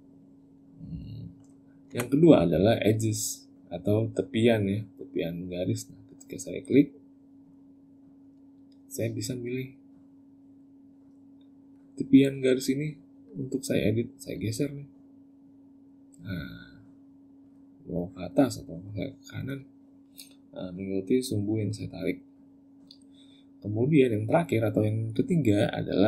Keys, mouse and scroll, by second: 1.7 Tab, 7.1 click, 10.2 click, 11.5 click, 12.4 click, 13.0 click, 14.1 click, 17.8 click, 18.7 click, 22.3 click.